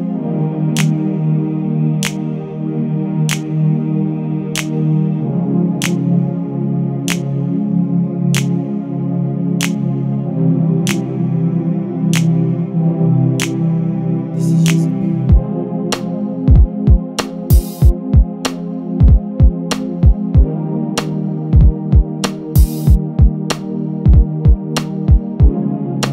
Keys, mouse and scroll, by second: 0.3 l, 0.6-1.0 scroll down 1, 1.0 shift+d, 2.0-2.6 scroll down 3, 3.1 click, 3.4 l, 3.6 shift+d, 6.5 Tab, 6.8 Tab, 7.5 click, 9.5 KP_1, 11.1 x, 11.8 l, 13.1 x, 14.0 click, 17.1 Tab, 17.7 click, 19.4 click, 20.0 click, 22.4 click, 22.9 click, 23.8 Tab, 25.1 l, 25.8 KP_1.